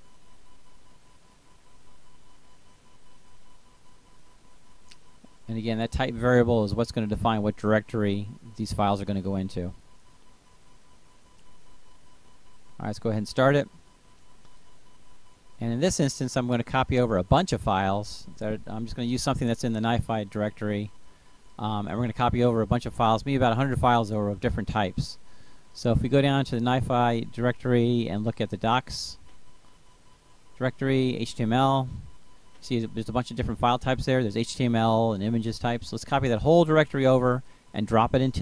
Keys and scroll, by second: 38.2 ctrl+c.